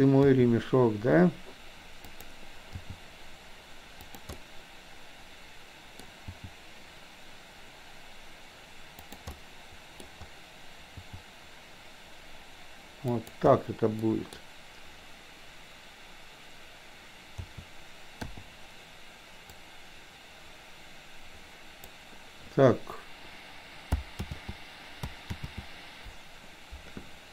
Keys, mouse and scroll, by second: 0.3 r, 2.8 g, 4.4-6.1 middle drag, 6.3 g, 9.4 middle click, 11.0 g, 14.0 middle click, 17.4 a, 18.3 i, 19.6-21.9 drag, 24.3 ctrl+z, 25.4 ctrl+z.